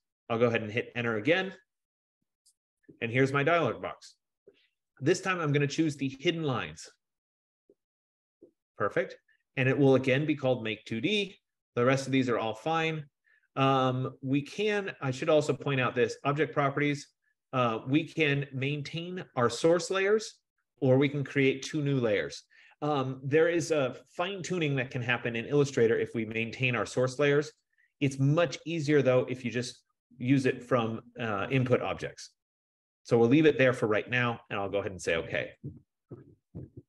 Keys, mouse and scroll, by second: 2.5 Return, 6.2-11.6 drag, 35.7-36.8 drag.